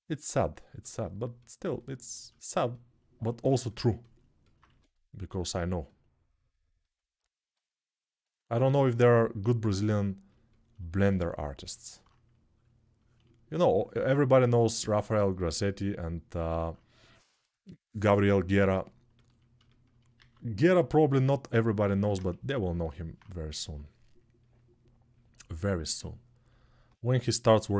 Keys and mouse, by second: 4.4 1, 20.0 alt+q, 21.0-27.7 alt+shift+drag, 21.6 alt+q, 22.1 1.